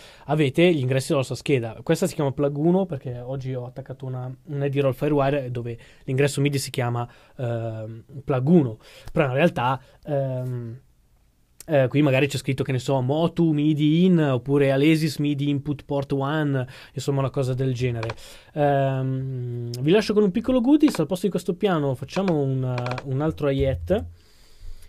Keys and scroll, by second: 23.4-24.8 typing.